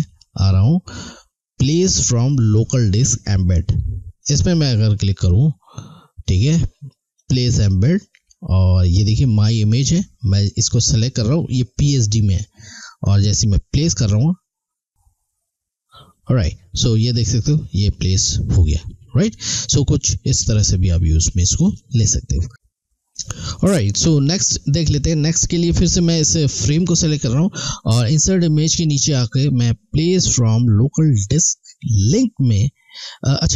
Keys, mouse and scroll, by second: 4.2 click, 10.6 click, 13.7 click, 26.0 click.